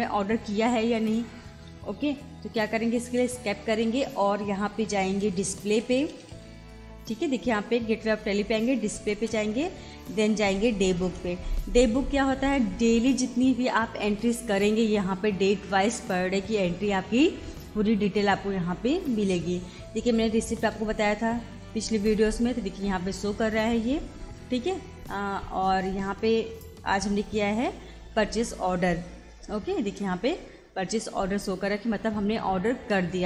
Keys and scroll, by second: 1.9 Escape, 4.8 Down, 9.2 Return, 10.5 Down, 11.1 Return, 20.7 Return, 24.2 Escape, 27.2 Down, 29.8 Return.